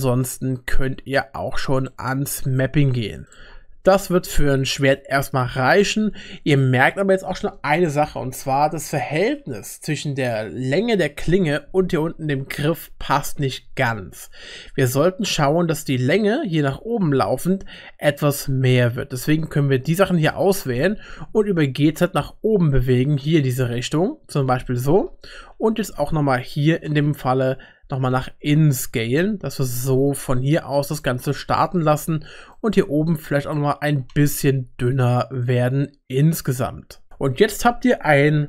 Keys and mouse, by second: 3.5 Tab, 3.5 g, 4.0-5.3 middle drag, 16.0 Tab, 17.2 Tab, 17.2 1, 17.7-20.3 drag, 21.4 g, 25.5 ctrl+r, 27.9 s, 32.6 click, 33.9 s, 37.1 Tab.